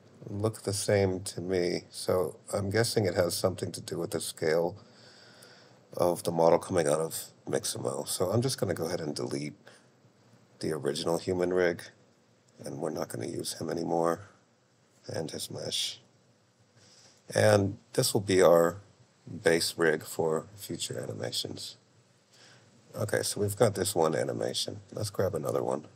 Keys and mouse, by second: 4.0-5.4 middle drag, 10.3 click, 12.2 Delete, 14.5 click, 16.0 Delete.